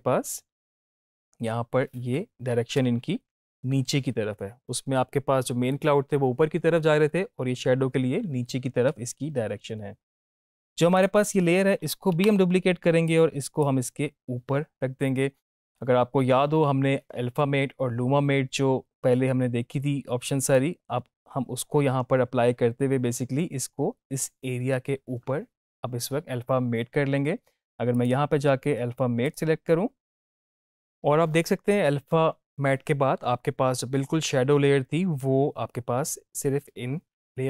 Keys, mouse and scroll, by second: 2.7 space, 8.9 space, 10.9 click, 12.1 ctrl+d, 13.0-13.7 drag, 22.4 click, 27.9 click.